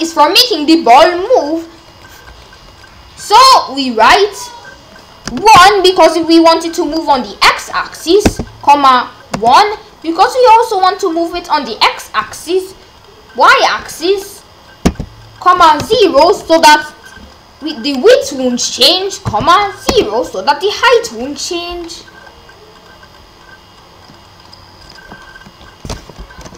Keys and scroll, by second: 5.2 1, 8.2 ,, 9.3 1, 14.8 ,, 15.8 0, 19.3 ,, 19.9 0.